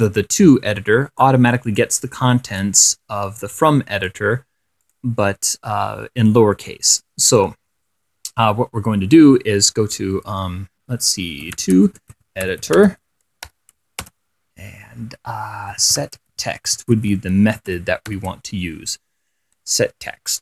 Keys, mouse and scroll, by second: 0.7-1.7 drag, 1.9 click, 2.9-4.6 drag, 5.1 click, 7.2 click, 11.5-14.3 typing, 15.8-18.4 typing.